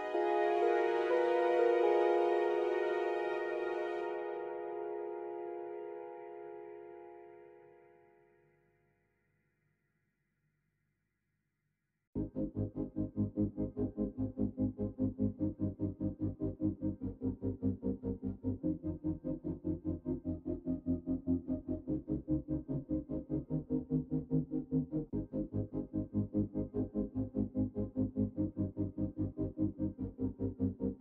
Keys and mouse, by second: 0.0 KP_1, 0.4 alt+z, 1.2-3.4 drag, 2.4 x, 4.0 middle click, 5.4 KP_3, 5.9 alt+z, 6.4 middle click, 7.9 click, 9.3 ctrl+l, 10.3 middle click, 11.5 middle click, 13.2 s, 16.0 Tab, 16.8-17.9 middle drag, 19.2 click, 20.6 Tab, 22.2 ctrl+i, 22.9 KP_3, 23.1 KP_Decimal, 23.8 alt+z, 26.2 alt+click, 29.4 g.